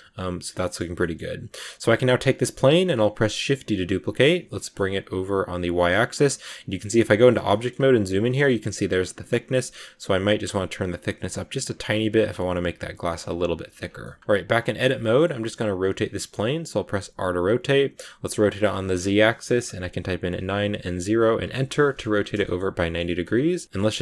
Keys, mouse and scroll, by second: 0.4 scroll down 1, 0.5 middle click, 1.2 scroll down 2, 1.7 right click, 1.9 middle click, 2.1 scroll up 1, 2.4 right click, 2.7-3.2 scroll down 1, 3.2 shift+d, 5.7 scroll down 1, 5.8 middle click, 6.2-6.6 scroll up 2, 6.6 Tab, 6.6 middle click, 7.2-7.6 scroll up 3, 7.4 middle click, 8.1-12.1 middle drag, 10.1 shift+click, 12.1-13.1 drag, 13.1 scroll down 1, 13.9 middle click, 14.2 Tab, 14.8 scroll down 1, 14.9 middle click, 15.6 r, 22.0 scroll down 1, 22.3-23.5 shift+middle drag, 23.5 scroll up 1, 23.6 middle click, 23.8 g.